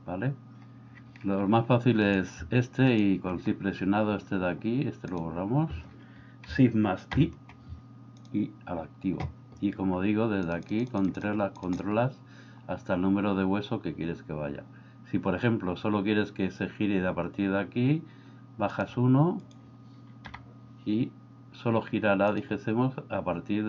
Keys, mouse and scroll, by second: 7.2 shift+i, 10.5 click, 11.0 click, 18.8 click, 20.4 g.